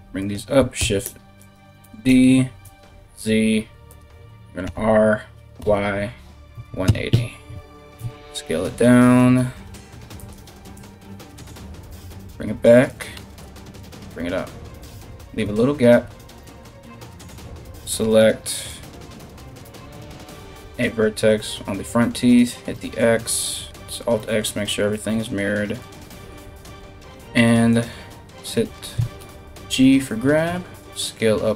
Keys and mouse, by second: 0.4 shift+s, 1.5 shift+d, 4.3 r, 7.6 s, 10.4 KP_3, 11.5 g, 12.8 g, 18.3 right click, 19.3 1, 19.9 right click, 20.5 right click, 22.0 click, 23.4 alt+x, 25.4 right click, 26.4 g, 28.8 g.